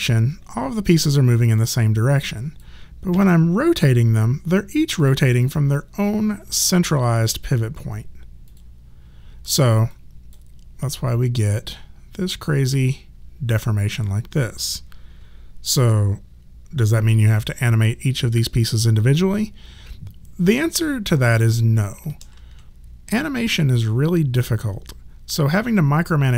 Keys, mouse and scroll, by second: 0.9 click, 3.1 e, 5.0 click, 22.2 ctrl+z.